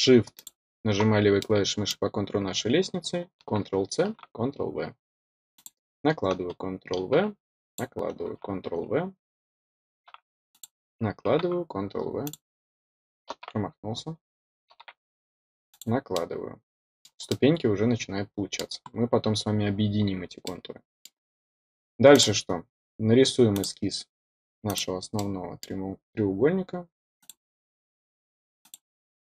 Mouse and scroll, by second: 0.3 click, 1.3-1.8 middle drag, 5.5 click, 7.6 click, 10.4 click, 12.2 click, 15.6 click, 16.1-17.0 middle drag, 17.2-18.5 middle drag, 18.8-19.1 scroll up 2, 20.4 middle click, 22.0 click, 23.5 click, 24.6 click, 25.1 middle click, 27.1 click, 28.5 click.